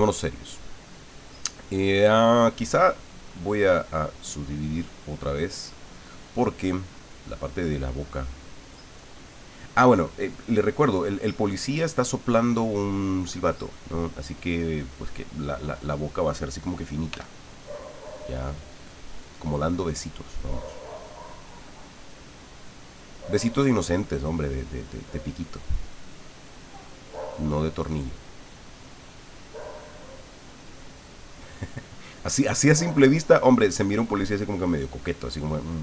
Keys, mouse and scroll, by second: 4.3 click, 17.1 f, 17.7 click, 18.7 click, 20.7 click, 21.7-23.8 drag, 24.0-25.4 drag.